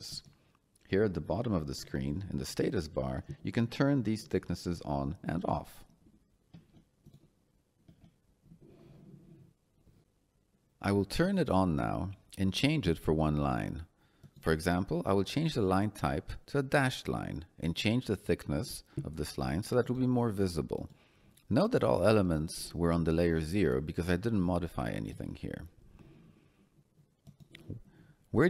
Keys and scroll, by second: 15.9 Escape, 24.5 Escape.